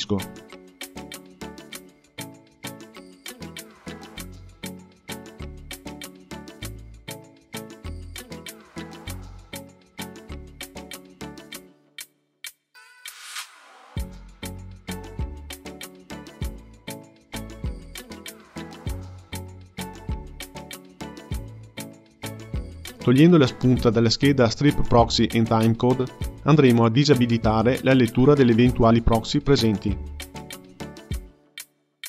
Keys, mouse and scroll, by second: 0.0 click, 9.6-12.7 drag, 13.2 space, 15.3 space, 16.1-18.3 drag, 18.3 space, 21.7 space, 25.0 click, 27.0 space, 31.5-32.0 drag.